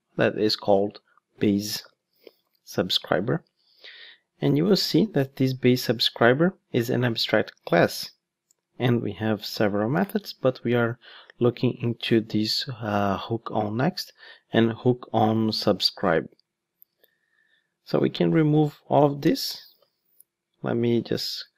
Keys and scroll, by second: 3.6 Return, 5.3 super+b, 16.7 ctrl+Tab.